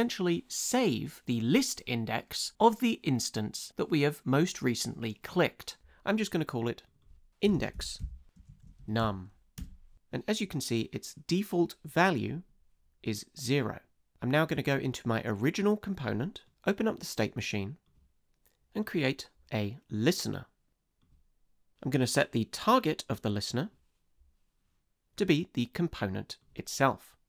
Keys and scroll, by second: 7.2-9.5 typing, 9.6 Return.